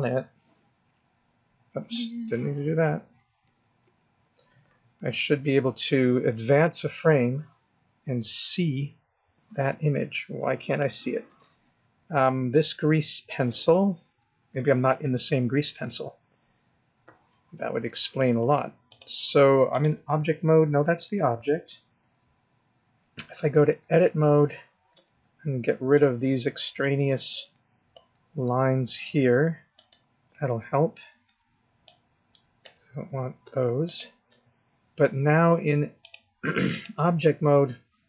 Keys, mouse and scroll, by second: 1.0 Left, 3.2 Right, 3.4 ctrl+z, 3.9 ctrl+z, 6.7 Right, 7.8-8.5 scroll down 1, 8.5-9.7 scroll down 1, 9.7 scroll up 1, 14.2 Left, 18.9 click, 21.6 scroll down 1, 23.8 Tab, 24.9 b, 29.1 x, 31.2 b, 33.4 x, 36.0 click.